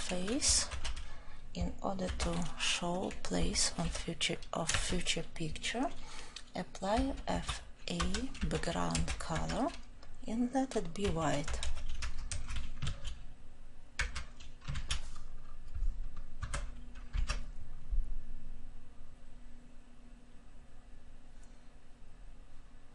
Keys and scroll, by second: 0.7 ctrl+;, 9.3 Return.